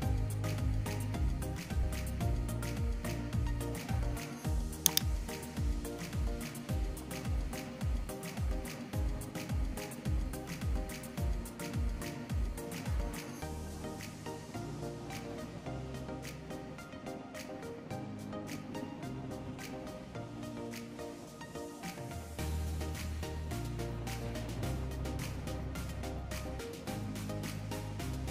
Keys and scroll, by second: 4.8 ctrl+c, 5.0 ctrl+v, 12.1 ctrl+c, 12.4 ctrl+v, 22.8 ctrl+c, 23.1 ctrl+v.